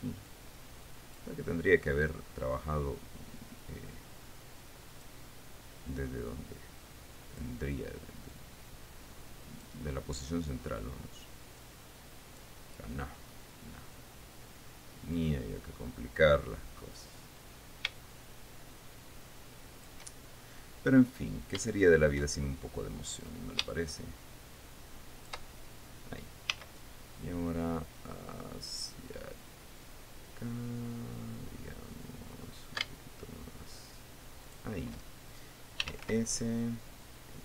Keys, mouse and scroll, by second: 0.8 click, 2.0-2.6 scroll up 2, 2.8 scroll up 2, 4.2-5.8 drag, 6.8-8.2 drag, 8.9-10.4 drag, 12.2 click, 15.7-20.6 drag, 23.8-26.0 drag, 27.1 s, 35.0 shift+click, 36.1-37.1 typing.